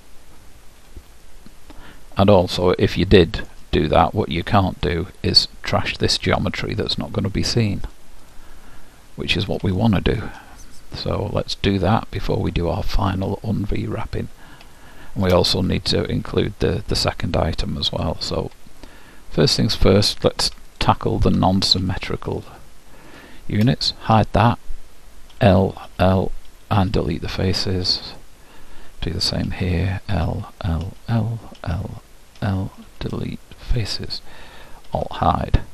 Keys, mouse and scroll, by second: 2.6-8.0 middle drag, 5.3-7.2 drag, 8.0-10.0 drag, 9.8-11.8 middle drag, 12.0-13.6 drag, 13.3-16.8 middle drag, 17.9-19.9 drag, 20.7-25.0 drag, 24.2 h, 25.4 l, 25.9 l, 26.8 Delete, 29.5-32.4 typing, 33.1 Delete, 34.9 alt+h.